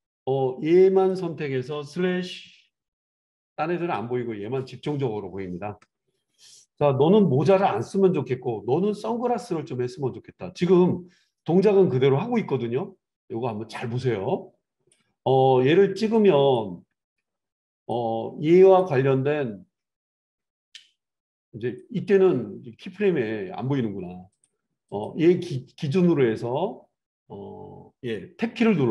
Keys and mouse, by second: 3.6 /, 13.8-17.9 drag, 17.9-18.7 middle drag, 18.7 click, 18.8-21.1 middle drag, 21.1-25.0 drag, 25.0-28.9 middle drag.